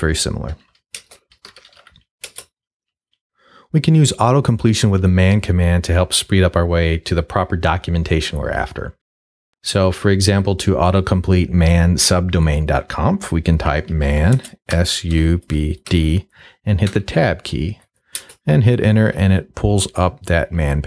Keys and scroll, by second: 0.0-2.3 typing, 1.0 shift+Return, 13.7-16.4 typing, 16.9 Tab, 18.1 Return.